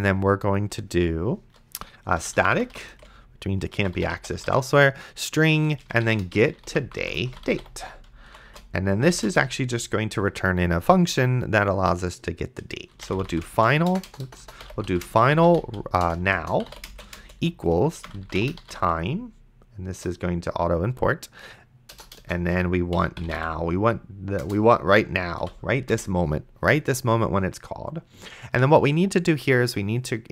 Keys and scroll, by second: 2.0-9.2 typing, 9.3 Return, 12.7-19.3 typing, 19.9 Return, 21.9-23.9 typing, 24.4 Return, 25.4 ;, 25.9 Return.